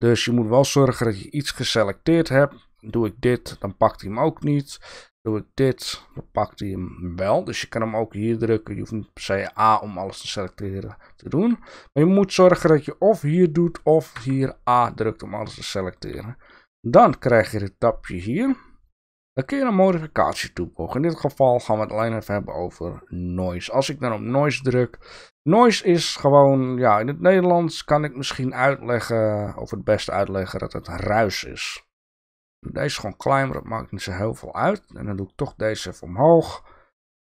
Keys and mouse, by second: 1.2 click, 2.9 click, 4.4 click, 5.1 click, 6.0 click, 14.1 a, 19.9-23.5 drag, 25.1 shift+middle click, 26.1-28.6 drag, 28.9 shift+middle click, 32.1-33.2 drag.